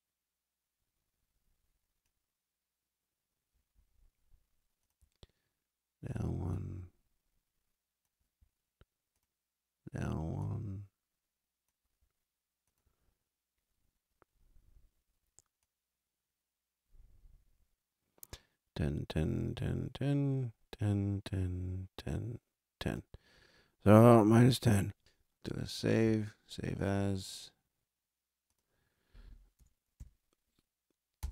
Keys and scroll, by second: 29.4 BackSpace, 29.8 3, 31.1 Return.